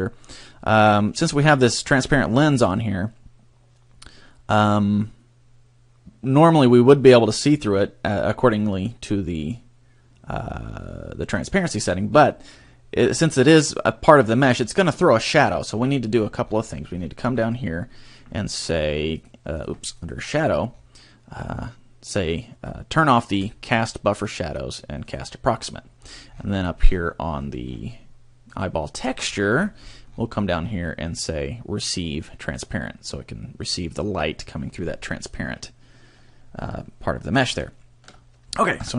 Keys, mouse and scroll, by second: 2.1 middle click, 7.6 click, 15.9-18.6 scroll down 19, 18.6-19.1 scroll down 1, 19.1 click, 19.6 click, 19.9 click, 20.4-20.9 scroll down 4, 23.5 click, 25.1 click, 25.9-28.2 scroll up 18, 28.2 scroll up 2, 28.6 click, 29.1-30.9 scroll down 22, 32.5 click, 37.7 shift+middle click, 38.7 KP_0.